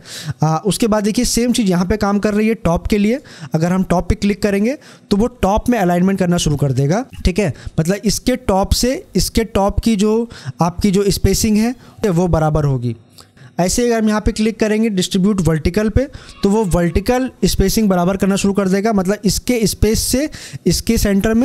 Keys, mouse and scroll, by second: 2.9 click, 15.6 click.